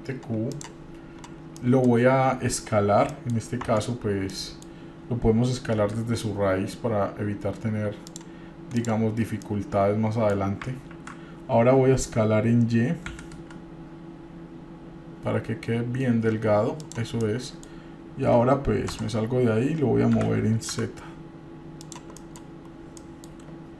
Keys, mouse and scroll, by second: 1.3-1.7 scroll down 3, 1.7-2.1 middle drag, 3.3 middle click, 3.8 Tab, 4.6 middle click, 6.0 s, 8.9 click, 9.6 middle click, 11.1 ctrl+z, 13.3 s, 17.4 middle click, 19.1 Tab, 20.3 g, 22.4 middle drag, 22.7-23.2 scroll up 2, 23.2 middle click.